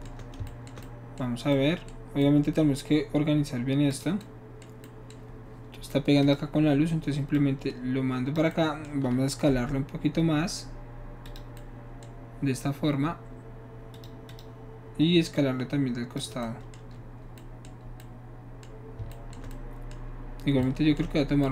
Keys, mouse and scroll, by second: 3.9 click, 6.2 click, 7.4-8.4 drag, 9.8 s, 11.3 click, 14.0 click, 14.3 click, 15.4 click.